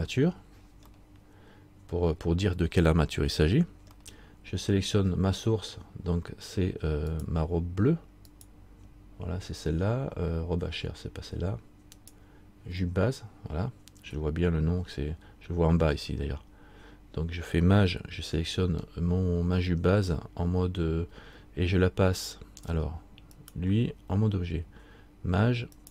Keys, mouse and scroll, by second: 1.1 middle click, 4.2 middle click, 7.3 shift+right click, 12.2 shift+right click, 18.6 scroll down 1, 23.5 right click.